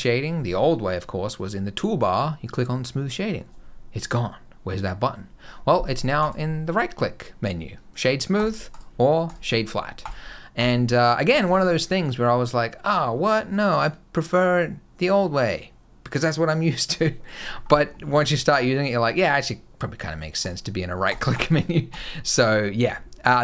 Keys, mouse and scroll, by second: 6.0 right click, 8.5 right click, 9.8 right click, 17.3-20.2 scroll down 10, 20.2 right click, 21.2 right click, 22.7-23.1 scroll up 2, 23.2 shift+middle click.